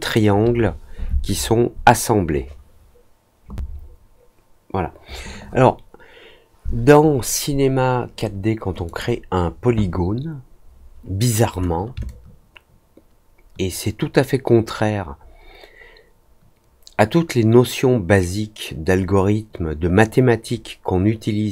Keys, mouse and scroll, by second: 8.8 click, 12.0-21.5 alt+drag.